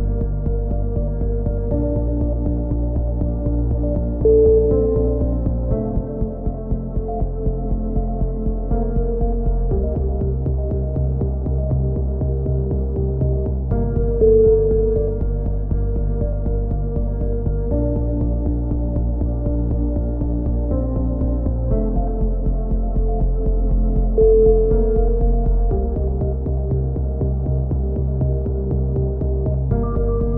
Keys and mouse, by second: 0.1 click, 1.8-4.0 typing, 2.3 middle click, 3.2 middle click, 4.1 click, 7.0 KP_1, 7.6 middle click, 8.2 Tab, 9.8 Tab, 9.8 right click, 11.1-12.8 right drag, 12.6 s, 15.5-17.5 drag, 15.7 a, 15.9 z, 16.2 z, 18.1 KP_3, 18.5 z, 20.8 z, 21.2 click, 22.6 ctrl+z, 22.8 ctrl+z, 23.1 a, 24.0 KP_3, 24.4 z, 25.1 ctrl+r, 29.5 z, 30.0 a.